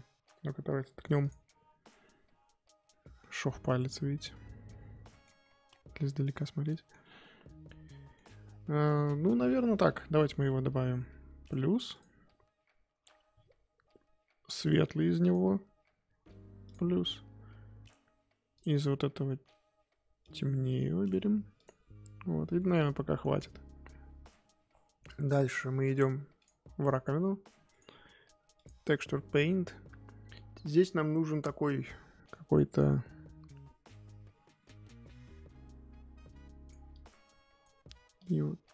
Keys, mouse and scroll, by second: 1.3 click, 1.9-2.4 scroll up 3, 2.8 scroll down 2, 2.9 middle click, 3.4-4.2 scroll up 4, 4.2-5.4 middle drag, 5.4-6.0 scroll down 7, 6.0 middle click, 6.9-7.4 scroll up 7, 7.7-9.1 middle drag, 9.1-12.0 scroll down 1, 15.2-18.6 drag, 20.2-22.5 drag, 22.5-25.9 middle drag, 25.9 click, 26.6 scroll down 1, 26.7-28.6 middle drag, 28.6-36.0 drag, 36.9-38.7 drag.